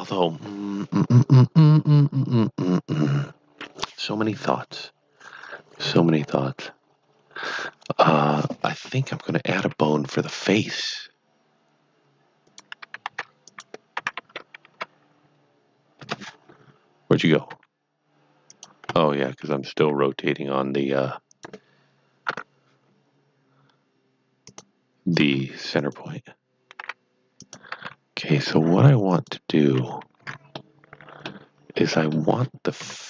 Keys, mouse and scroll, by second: 9.6 KP_3, 12.4 KP_3, 12.4 click, 13.1 d, 13.5 click, 13.9 r, 14.1 KP_9, 14.6 KP_Subtract, 15.9 KP_Enter, 16.6-17.5 scroll down 1, 17.5 g, 18.5 click, 18.8 scroll up 2, 19.7 s, 21.4 click, 24.5 click, 25.3 g, 25.8 click, 26.8 r, 27.4 click, 27.7 g, 29.1 click, 30.5 middle click, 32.0 middle click, 32.7 KP_3.